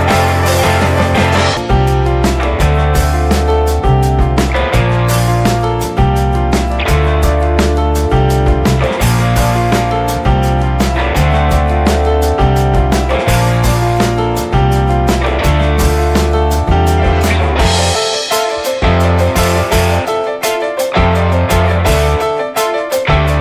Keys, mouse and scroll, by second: 0.7 click, 1.5 click, 3.7 click, 4.2-6.1 middle drag, 6.1 click, 6.7 click, 7.3 click, 8.0 click, 9.4 click, 10.2 click, 12.3-13.7 middle drag, 15.0-16.8 middle drag, 17.3 middle click, 17.8 click, 21.0 click, 21.2 scroll down 3, 21.5 middle click, 22.2 click, 22.9 s.